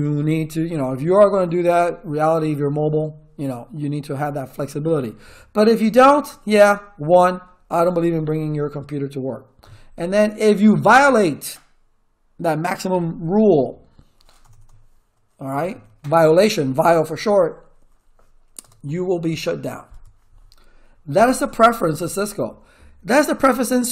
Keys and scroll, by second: 9.6 Up, 10.6 BackSpace, 14.4-16.2 typing, 18.6-19.9 typing, 21.1 Return.